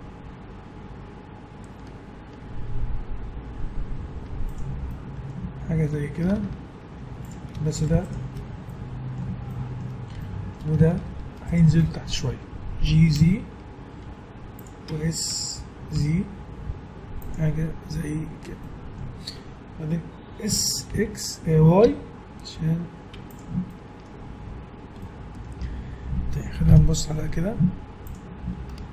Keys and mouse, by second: 4.9-6.4 middle drag, 6.3 Tab, 7.0 Tab, 7.5 a, 8.7 click, 9.7 click, 10.1 middle click, 11.5-12.8 middle drag, 12.8 g, 15.3 s, 18.6-21.4 middle drag, 20.5 s, 23.4 Tab, 23.5-24.7 middle drag, 26.7 KP_1, 27.2 z.